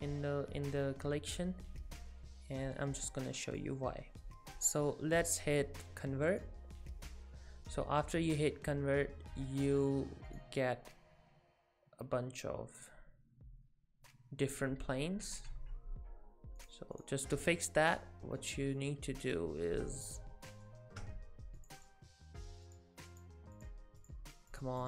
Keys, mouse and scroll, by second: 3.5 click, 10.3 click, 14.4-15.0 scroll down 8, 15.3-16.0 scroll down 34, 16.0-16.6 scroll up 14, 16.6 click, 17.0 click, 17.9-19.2 scroll down 11, 18.8 middle click, 21.6 click, 21.8 click, 22.7 click, 24.0 click, 24.5 click.